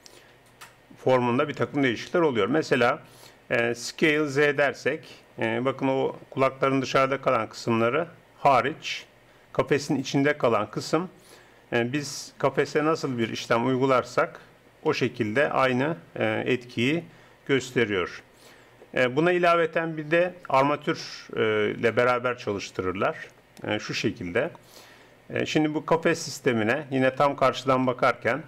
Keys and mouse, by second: 4.2 s, 15.0 s, 19.2 Tab, 27.2 KP_1, 27.7 KP_5.